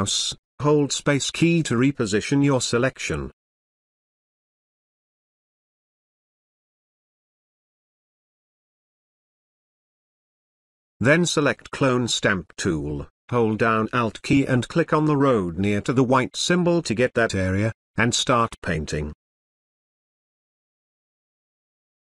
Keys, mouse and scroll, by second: 12.4-15.3 drag, 18.3 alt+click, 20.0-21.2 drag.